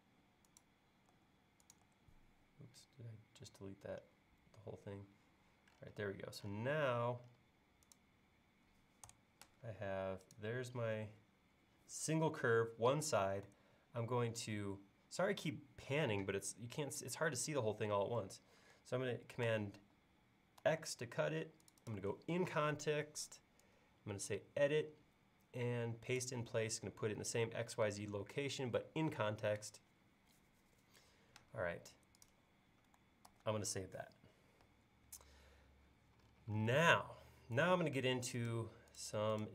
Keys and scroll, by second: 1.2 BackSpace, 1.9 BackSpace, 9.1 BackSpace, 19.5 super+c, 20.7 super+x, 33.4 super+s.